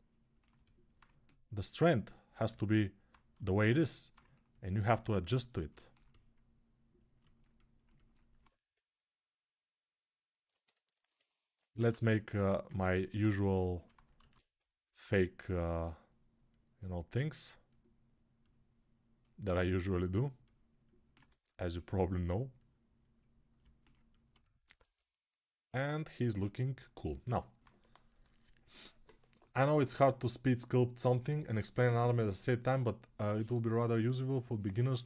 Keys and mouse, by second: 0.7-3.1 ctrl+drag, 3.3 alt+click, 3.7 alt+click, 3.9-5.4 drag, 11.6 alt+q, 13.9 alt+q, 21.5-35.0 ctrl+alt+right drag.